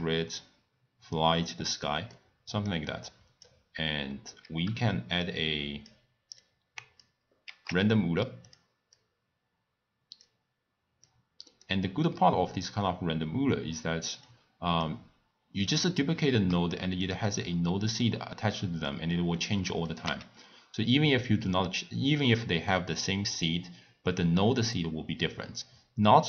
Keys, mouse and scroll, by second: 3.0 click, 4.3 click, 5.2 click, 6.4 click, 7.8 shift+d, 8.9-14.1 drag, 14.2 click, 15.7 click, 16.6 shift+d, 18.4-20.0 drag, 20.5 x.